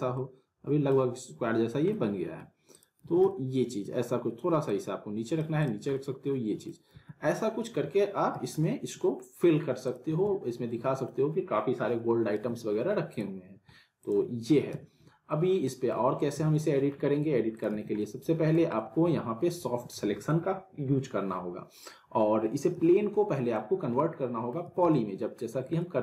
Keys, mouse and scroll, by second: 0.1-1.1 alt+middle drag, 1.6 scroll down 1, 1.9-2.5 alt+middle click, 2.7 click, 3.0 z, 3.3-3.9 middle drag, 4.7-5.9 click, 5.9-6.9 alt+middle click, 6.9 z, 8.6-9.2 alt+middle click, 9.8 click, 10.0 z, 10.5-11.1 alt+middle click, 11.4-12.4 scroll down 1, 12.4 z, 13.1 click, 14.7 z, 15.3-15.9 alt+middle click, 16.3 z, 16.6 middle click, 17.5 middle click, 17.5 click, 17.7 z, 18.0-18.6 alt+middle drag, 22.7 z, 23.1-23.7 alt+middle click, 23.7 scroll down 1, 24.0-24.6 alt+middle click, 24.6 z, 24.9-25.5 alt+middle click, 25.5 scroll down 1, 25.8-26.0 middle click.